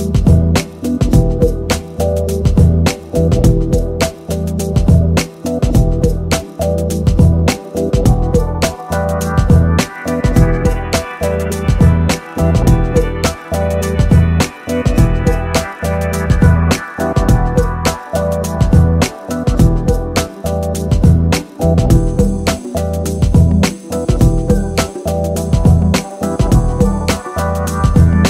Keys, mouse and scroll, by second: 3.6 click, 5.2-6.4 drag, 10.6 right click, 11.5-12.9 middle drag, 14.0 right click, 18.7 click, 23.8 middle click, 24.5 middle click, 25.2 middle click, 25.4 middle click, 26.0 KP_7, 27.7 shift+a.